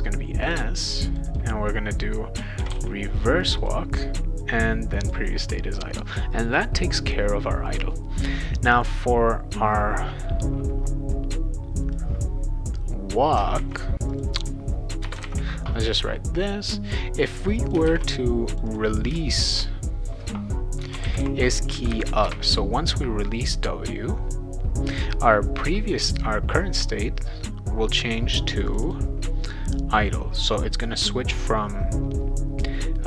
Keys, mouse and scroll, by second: 0.4 click, 1.1 click, 1.3 click, 2.3-3.2 typing, 3.4 click, 5.0 click, 12.0-13.4 drag, 13.6 ctrl+c, 14.1 click, 15.1 Return, 15.2 ctrl+v, 17.3 click, 17.9 shift+w, 18.5 click, 18.6 click, 20.6-21.8 typing, 22.2 Return, 28.7 click, 28.8 click.